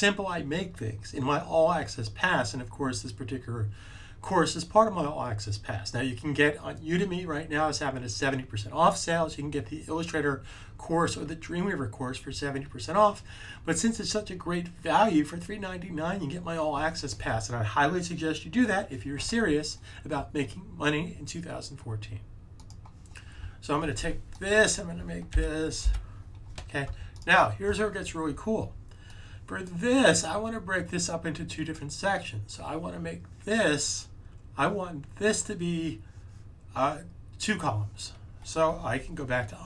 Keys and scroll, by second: 25.2 1.